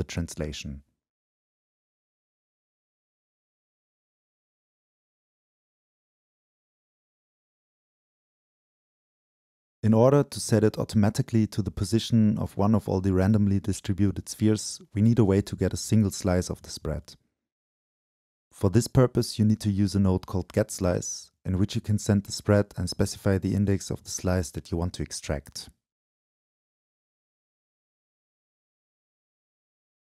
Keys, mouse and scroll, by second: 0.4-0.8 middle drag, 0.8-4.4 drag, 4.6-6.3 shift+drag, 6.3-7.1 middle drag, 7.1-8.0 drag, 8.1-12.8 shift+drag, 13.5-22.0 drag, 22.0-23.7 middle drag, 23.7-25.7 drag, 25.7 right click, 26.2-27.0 scroll up 2, 27.0-28.2 scroll up 1, 28.2-29.5 scroll down 2, 29.5-30.2 scroll down 1.